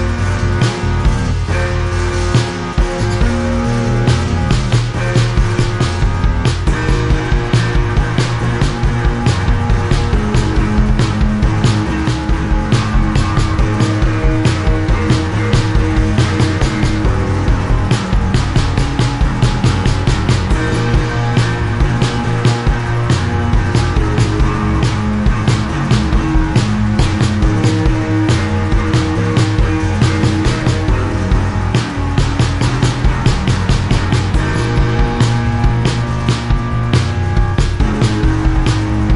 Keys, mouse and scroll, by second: 0.1 Return, 1.3 click, 2.4 click, 5.3 click, 5.7 click, 7.7 click, 8.6 click, 8.8 click, 9.5 ctrl+z, 10.1 click, 11.0 click, 12.1 click, 12.7 ctrl+z, 12.7 click, 21.4 click, 23.7 click, 26.0 click, 27.1 click, 27.8 click, 29.7 click, 32.5 click, 34.6 click, 38.6 click.